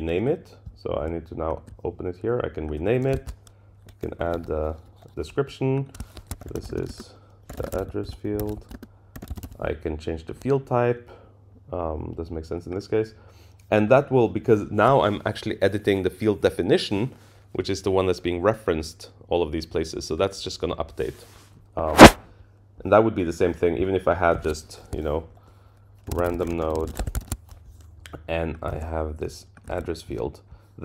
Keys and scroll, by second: 4.2 ctrl+i, 26.9 Return, 27.0 Tab, 28.7 super+c, 29.7 super+v.